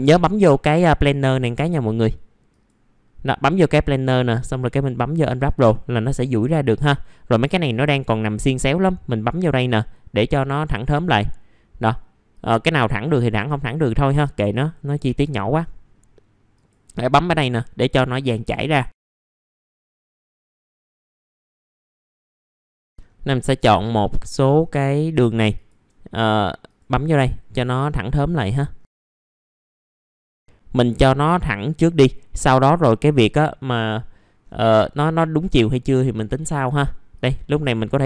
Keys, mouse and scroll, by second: 6.4 middle click, 7.5-8.3 scroll down 1, 9.2 click, 10.5 middle click, 12.3-15.1 drag, 15.1 click, 15.6-16.5 scroll down 1, 16.5 click, 17.9 middle click, 18.1-18.5 scroll down 1, 18.5 middle click, 18.9 click, 19.1 scroll up 1, 19.2-19.8 scroll down 1, 19.8 click, 20.0-20.5 scroll up 2, 20.5 click, 21.9 scroll down 1, 22.2-22.6 scroll up 1, 22.7 ctrl+click, 22.8-23.3 scroll down 1, 23.3 middle click, 24.3 scroll up 1, 25.5 ctrl+click, 26.6 click, 27.4 middle click, 27.5 scroll down 1, 28.4 middle click, 29.1 click, 29.6 scroll down 1, 29.8 middle click, 29.9-30.2 scroll up 1, 31.4 ctrl+click, 33.0 click, 34.1 middle click, 34.4 scroll down 1, 35.2 middle click, 37.1 click.